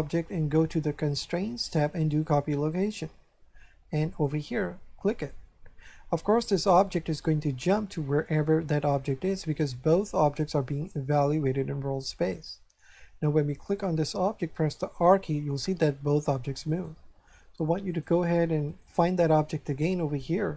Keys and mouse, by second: 0.7 click, 4.1 click, 5.2 click, 13.3 right click, 14.7 r, 16.7 right click, 17.8 right click.